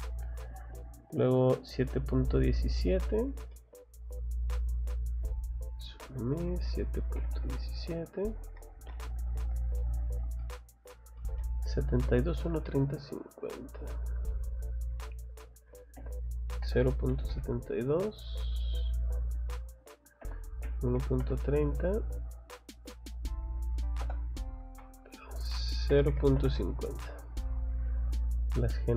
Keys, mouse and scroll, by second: 0.6 middle click, 1.0 middle click, 1.9 middle click, 2.8 middle click, 3.1 scroll down 1, 3.5 middle click, 4.7 click, 8.3 click, 8.7 scroll down 1, 10.4 middle click, 10.6 middle click, 11.2 middle click, 12.1 scroll down 1, 12.4 middle click, 13.2 scroll up 1, 14.1 click, 14.8 click, 18.2 click, 18.7 click, 19.1 click, 22.1 click, 22.8 click, 24.0 Return, 27.3 click, 27.6 scroll down 1, 28.6 scroll up 1.